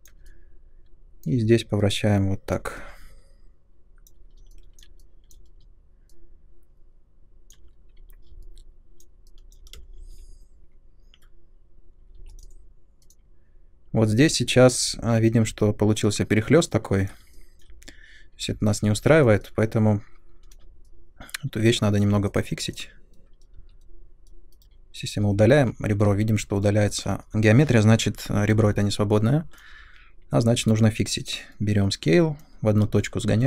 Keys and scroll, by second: 9.7 space, 10.1 2, 12.1 3, 23.5 2, 24.5 Delete, 25.4 ctrl+z, 30.6 r, 32.8 space.